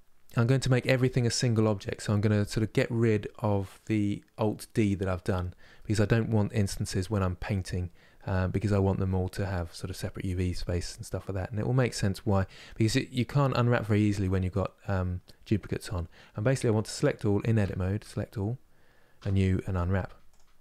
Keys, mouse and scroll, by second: 1.3 a, 5.5-17.3 middle drag, 17.3 Tab, 17.7 a, 20.0 u, 20.4-20.6 middle drag.